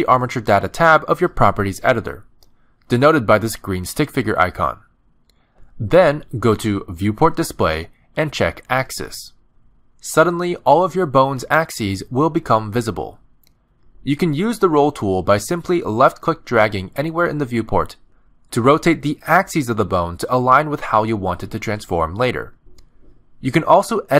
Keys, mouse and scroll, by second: 1.8 shift+middle click, 2.7-4.3 scroll down 1, 4.3 click, 10.7 click, 11.7 middle click, 13.0-13.5 scroll up 2, 13.6 shift+middle click, 15.2 Tab, 16.8 click, 23.0 ctrl+z.